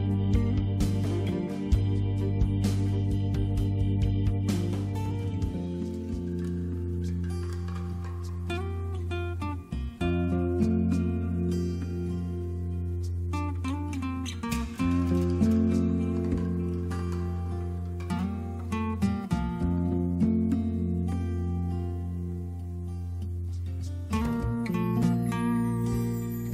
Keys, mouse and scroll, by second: 2.1-6.4 typing, 9.5 click, 12.4 click, 14.4 click, 18.4 click, 20.6 click, 25.2 click.